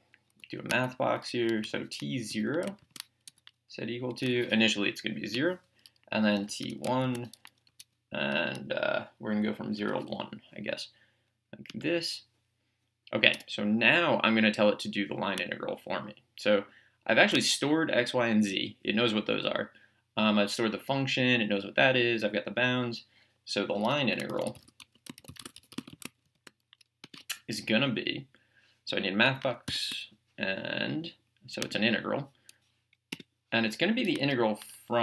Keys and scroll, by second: 1.1-4.2 typing, 5.4 Return, 6.4 t, 6.6 1, 7.7 =, 9.8 1, 11.7 Return, 13.4 BackSpace, 24.5-26.4 typing, 27.0 Return, 30.5 m, 33.2 Return.